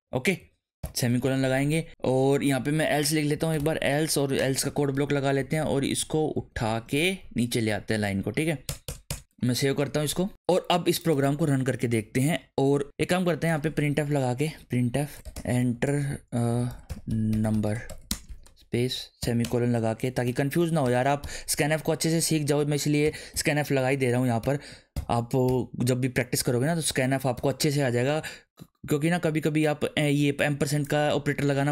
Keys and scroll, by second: 0.0 Right, 0.8 ;, 2.2 Down, 3.0-4.6 typing, 4.9 Up, 5.5 alt+shift+Down, 6.6 ctrl+z, 7.0 alt+Down, 7.7 alt+Up, 8.2 Down, 8.6 BackSpace, 9.3 ctrl+s, 14.2-19.2 typing, 14.9 Tab, 18.4 Right, 19.4 Return, 20.2-21.8 typing, 23.0 shift+5, 23.3 d, 23.7 Right, 24.4 /, 24.9 shift+7, 25.5 n, 27.0 Right, 31.3 ctrl+s.